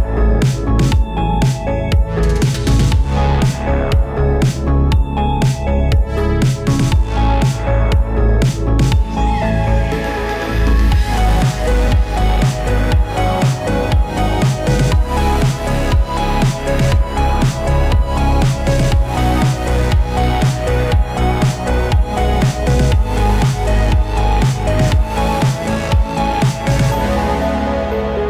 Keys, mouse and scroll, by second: 0.0 right click, 0.8 typing, 0.8 click, 3.7-8.6 typing, 9.4 Return, 11.2 click, 11.6 right click, 12.4 click, 15.6-19.0 typing, 19.5 Return, 21.9 click, 22.4 ctrl+space, 22.8-24.3 typing, 24.6 Return, 26.4-28.2 drag.